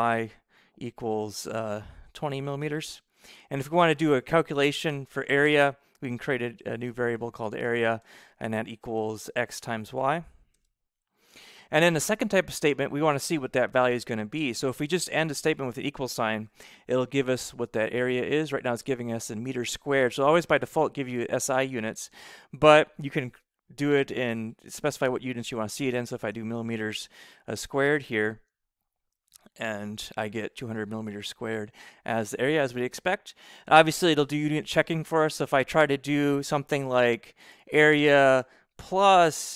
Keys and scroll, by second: 0.8 =, 2.0 2, 2.8 [, 3.1 m, 3.9 ], 6.0 Return, 6.8-9.4 typing, 10.4 shift+8, 11.2 y, 14.2-16.4 typing, 14.4 Return, 24.6 [, 26.1 m, 27.3 shift+6, 27.9 2, 28.2 Right, 29.0 ], 34.8 Right, 38.9 shift+=.